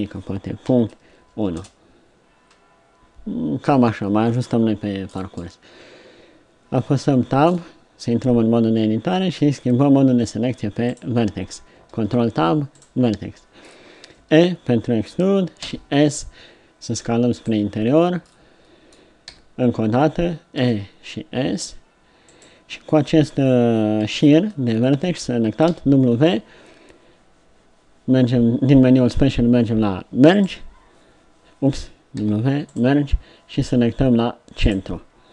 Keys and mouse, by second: 6.9 Tab, 10.2 ctrl+Tab, 12.0 ctrl+Tab, 14.1 e, 19.4 e, 25.7 w, 32.2 w.